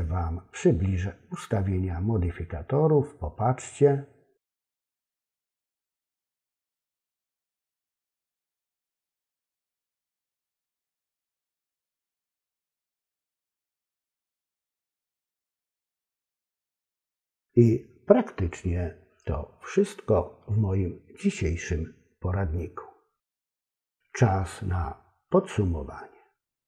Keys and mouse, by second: 4.4 click, 6.2 click, 6.9 click, 8.7 click, 11.2 click, 12.1 click, 13.7 click, 14.2 click, 15.7 click, 16.7 click.